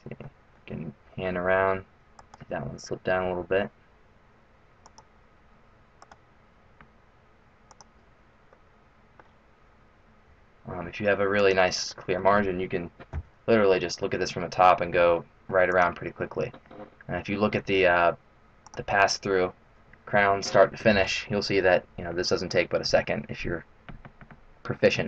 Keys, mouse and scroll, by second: 0.5 middle click, 2.2 right click, 3.2 g, 6.0 right click, 6.2 g, 8.5 middle click, 10.3 e, 11.8 middle click, 13.1 KP_7, 15.7 e, 16.1-17.1 scroll down 3, 18.6 click.